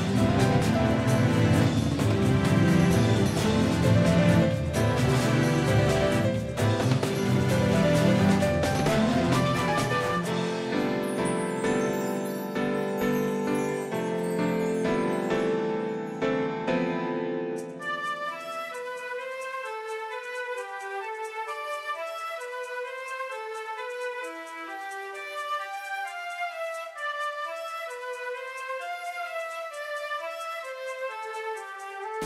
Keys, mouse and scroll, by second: 6.2 s, 12.6-14.9 drag, 15.3 a, 17.5 Tab, 18.5 z, 23.3 Tab, 27.3 z, 27.7 c.